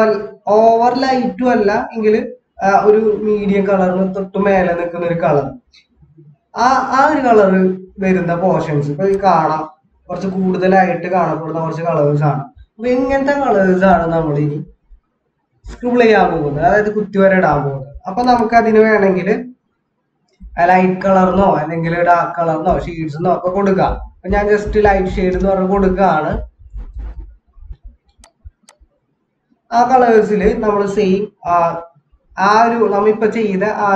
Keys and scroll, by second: 14.7 ctrl+z, 16.2 ctrl+z, 22.7 BackSpace, 23.8-27.6 typing.